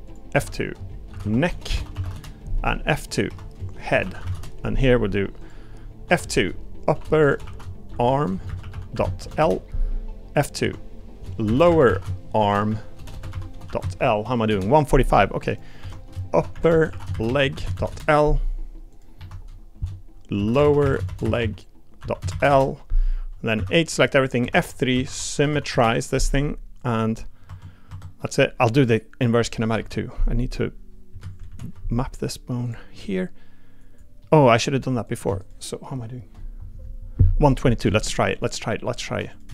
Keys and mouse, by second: 0.3 F2, 1.6 BackSpace, 3.3 F2, 5.4 click, 6.0 F2, 7.3 p, 10.6 F2, 13.1 BackSpace, 15.5 click, 15.8 F2, 16.7 p, 18.9 click, 19.2 F2, 23.5 a, 24.4 F3, 25.5 m, 27.5 Tab, 27.9 Tab, 28.2 middle click, 29.8 KP_3, 32.6 click, 32.9 g, 34.2 click, 35.4 shift+click, 39.3 click.